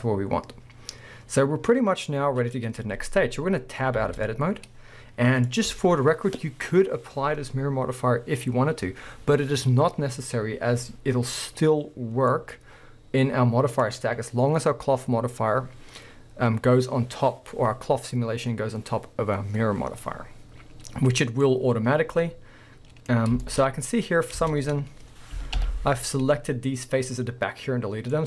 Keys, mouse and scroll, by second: 0.0-4.0 middle drag, 2.7-4.0 scroll down 2, 4.0 Tab, 5.5 click, 12.2 scroll down 1, 12.3-13.8 middle drag, 12.5 scroll up 1, 13.8 click, 20.0-22.1 middle drag, 21.5-22.1 scroll up 2, 22.2 middle click, 22.8-26.2 middle drag, 23.6 scroll up 1, 24.0 scroll down 1, 24.3 scroll up 1, 24.4 Tab, 24.9-25.6 scroll up 1, 25.6 alt+h, 26.2-26.8 scroll up 2, 26.8 scroll down 2, 27.1-28.1 middle drag, 28.1 scroll up 1.